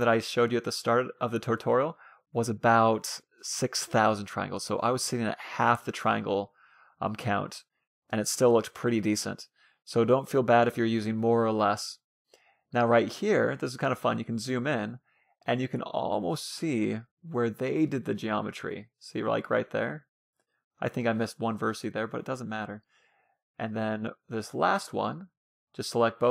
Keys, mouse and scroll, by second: 1.0 ctrl+z, 2.0 e, 5.0-6.5 middle drag, 5.3 e, 6.9 e, 7.9 e, 8.7 e, 9.7-12.1 middle drag, 10.0 e, 11.5 e, 13.6-14.8 middle drag, 13.6 e, 14.9 e, 16.2-17.6 drag, 16.3 middle click, 16.6 e, 17.6 e, 18.6 e, 20.0-22.3 middle drag, 21.1 e, 22.6 e, 23.6 e, 25.2 a, 25.4 c.